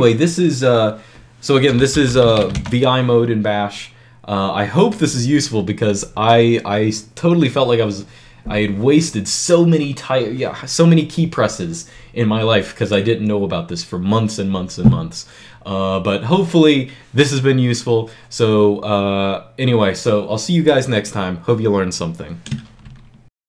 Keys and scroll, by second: 1.4-2.8 typing.